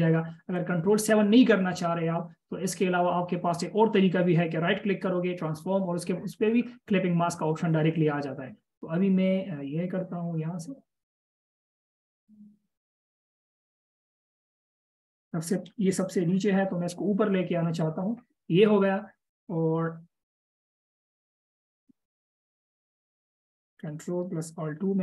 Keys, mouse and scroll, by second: 16.8 ctrl+shift+].